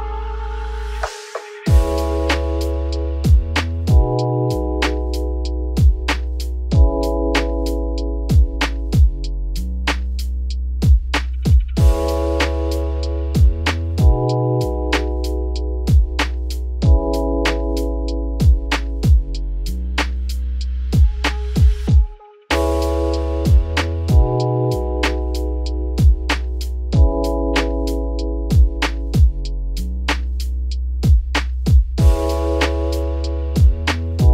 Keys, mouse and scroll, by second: 3.2 click, 3.7-5.3 shift+middle drag, 5.3 click, 5.7 click, 6.3-6.9 scroll up 2, 6.9 alt+x, 8.0-8.8 scroll up 3, 8.8-9.5 right drag, 9.5-10.6 shift+middle drag, 10.6 click, 11.4 click, 12.6-15.2 shift+drag, 15.4-16.0 scroll up 4, 15.6 shift+middle click, 16.7 click, 17.3 click, 17.8 g, 19.6 Tab, 20.0-20.3 scroll down 5, 20.9-21.4 scroll down 4, 21.4 shift+middle drag, 21.6-22.2 scroll up 5, 22.2-22.5 shift+middle drag, 22.5 Tab, 23.6 click, 24.5 shift+click, 24.8 shift+middle click, 25.2 scroll up 4, 26.0 shift+click, 26.4 g, 27.5 Tab, 27.7-28.4 scroll down 10, 28.4 shift+middle click, 28.7-29.5 scroll up 10, 29.2 shift+middle drag, 29.5 Tab, 30.6 click, 31.9 shift+click, 32.2-33.7 shift+middle drag, 33.7 shift+click, 34.1-34.3 shift+middle drag.